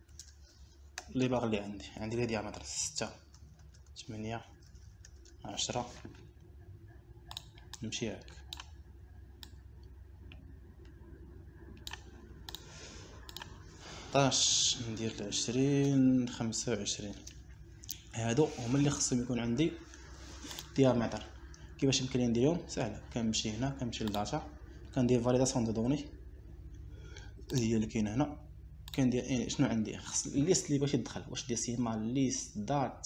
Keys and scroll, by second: 0.4 BackSpace, 1.3 6, 1.5 Return, 3.8 8, 3.9 Return, 4.7 1, 5.4 Return, 14.3 Delete, 16.6 0, 17.1 Return, 17.8 2, 18.6 Return.